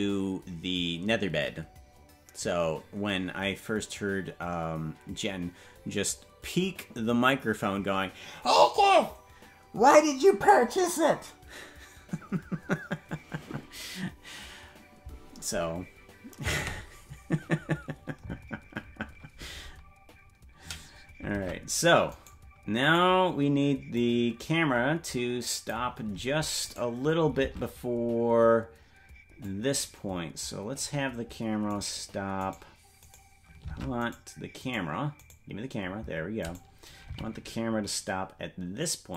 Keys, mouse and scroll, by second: 21.4 ctrl+Tab, 22.2 right click, 23.9-25.7 drag, 26.7 right click, 27.5 ctrl+Tab, 29.4-30.8 drag, 31.8 right click, 32.4-33.7 right drag, 33.7 ctrl+Tab, 34.1-36.3 right drag, 37.0 g.